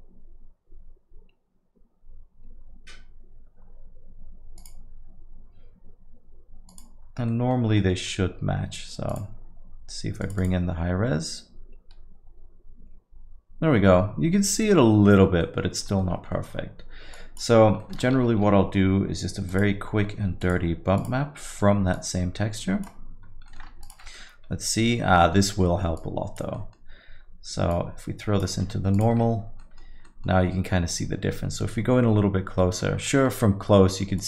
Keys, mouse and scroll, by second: 7.3 middle click, 7.6 scroll down 2, 7.8 middle click, 8.1 scroll up 1, 9.1 click, 9.1 scroll up 2, 15.4 middle click, 15.6-16.7 scroll down 7, 15.8 middle click, 16.3 middle click, 17.2 click, 17.6 scroll up 3, 17.8 middle click, 18.2 shift+a, 21.2 scroll up 1, 22.0 scroll up 3, 22.0 click, 23.3 scroll up 1, 23.5 middle click, 23.9 ctrl+shift+click, 24.1 middle click, 24.5 scroll up 1, 25.2 middle click, 25.3 scroll down 3, 25.9 scroll down 1, 26.0 click, 26.5 middle click, 26.9 scroll down 1, 27.6 scroll up 1, 27.7 click, 29.1 ctrl+shift+click, 30.0 middle click, 30.0 middle click, 31.0-31.7 scroll up 1, 32.1 scroll up 6, 32.6 middle click, 32.9 scroll down 2, 33.1 middle click.